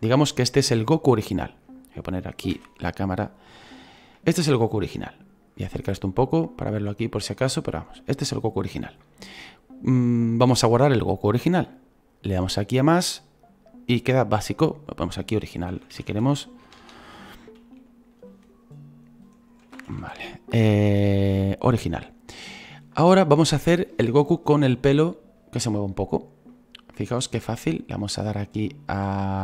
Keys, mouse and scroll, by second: 2.5 KP_1, 5.5 scroll up 5, 6.7 scroll up 3, 7.4-13.0 shift+middle drag, 13.0-21.2 drag, 27.3 scroll up 2.